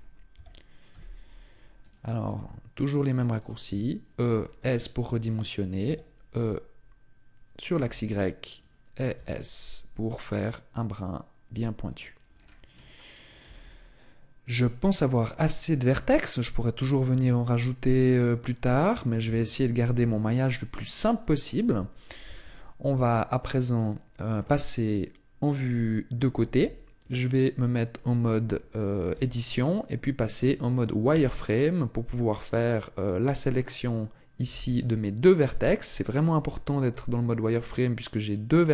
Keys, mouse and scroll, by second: 0.3 e, 1.9 click, 2.2 s, 3.3 click, 4.4 shift+middle click, 5.8 e, 8.5 click, 9.1 s, 11.9 click, 12.2-13.4 scroll down 6, 12.7-13.4 scroll up 1, 13.4 Tab, 13.4-14.4 scroll up 4, 14.9 scroll down 1, 15.3 Tab, 17.3 ctrl+r, 22.9 Tab, 26.3 KP_3, 29.1 Tab, 31.1 z, 34.4 b, 35.5 middle click, 36.5-37.1 scroll up 3, 37.1 scroll up 1, 37.1 shift+middle click.